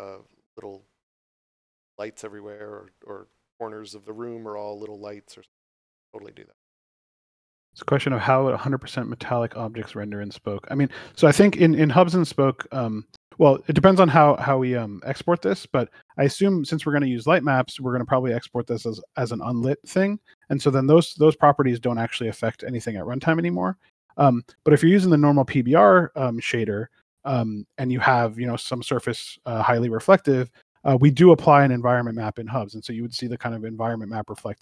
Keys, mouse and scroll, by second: 6.8 right click, 16.4 click, 21.4 right click, 26.7 Return.